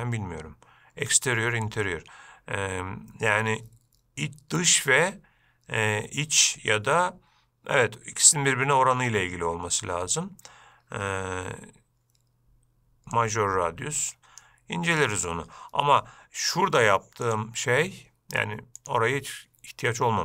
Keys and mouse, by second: 0.0-4.0 drag, 13.6-14.7 drag, 17.5 click, 19.0 click.